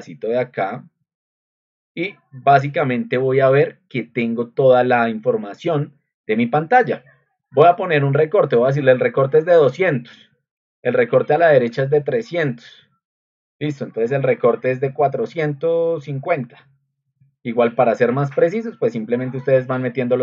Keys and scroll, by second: 8.5-9.4 typing, 11.4-12.3 typing, 13.4-18.6 typing.